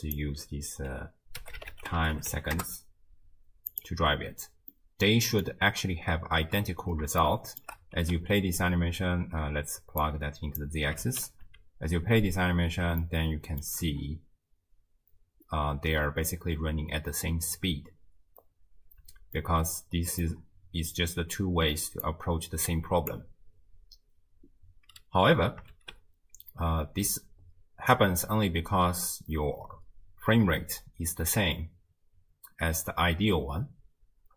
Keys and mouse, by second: 4.8 click, 7.3 shift+drag, 8.0 space, 8.9 space, 10.0 click, 10.2 click, 11.1 shift+space, 13.1-13.6 shift+drag, 19.0 space, 19.4 click, 22.1-23.1 drag, 25.7 shift+space, 27.1 space, 34.2 space.